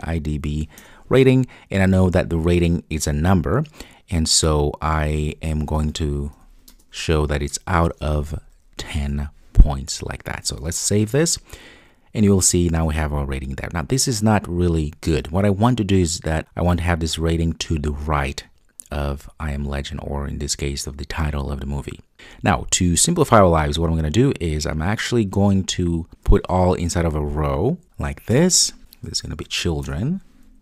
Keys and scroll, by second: 0.8 Return, 10.8 super+s, 26.0 alt+Return, 28.4 Return.